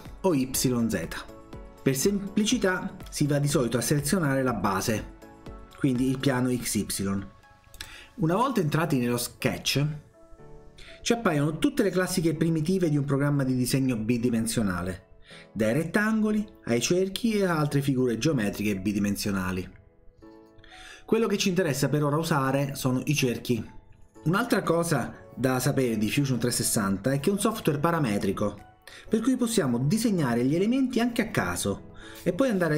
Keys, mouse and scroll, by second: 7.7 click, 23.1 click.